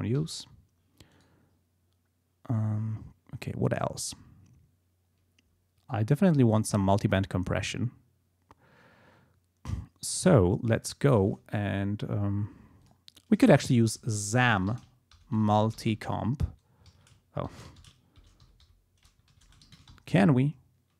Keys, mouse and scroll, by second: 0.3 Delete, 1.1 right click, 10.7 click, 12.8 click, 14.0-18.7 typing, 16.9 ctrl+a, 19.3 ctrl+a, 19.4 ctrl+BackSpace, 19.6 ctrl+shift+z, 19.9 ctrl+shift+m.